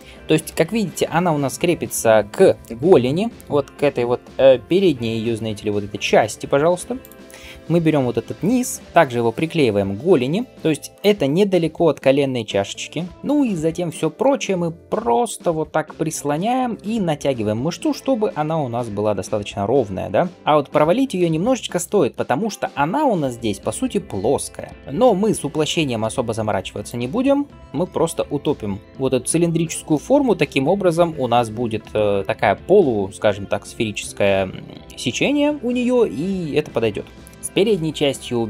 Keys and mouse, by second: 6.8 click, 8.8 ctrl+g, 11.4 g, 13.1-15.5 middle drag, 14.1 g, 15.5 click, 15.6-20.3 middle drag, 15.9 g, 18.4 g, 20.3 g, 20.6 g, 21.7 shift+click, 24.5 shift+click, 26.0 g, 27.6 shift+click, 31.5-38.4 middle drag, 33.7 click, 37.3 Tab.